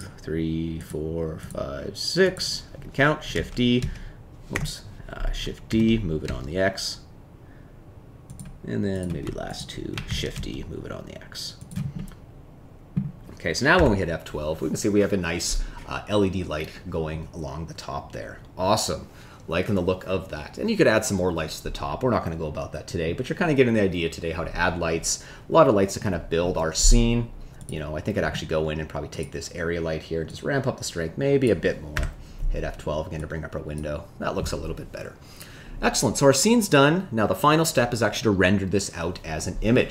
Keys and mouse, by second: 0.7 shift+click, 3.3 shift+s, 5.6 shift+d, 6.2 x, 8.9 click, 9.4 shift+click, 10.0 shift+d, 10.3 x, 11.9-12.9 middle drag, 14.2 F12, 29.1 click, 30.3-31.4 drag, 32.4 F12.